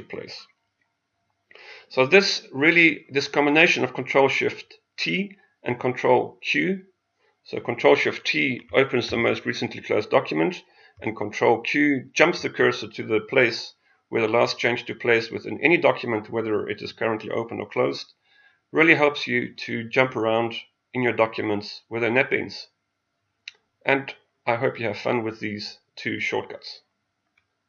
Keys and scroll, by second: 9.1 ctrl+shift+t, 12.2 ctrl+q.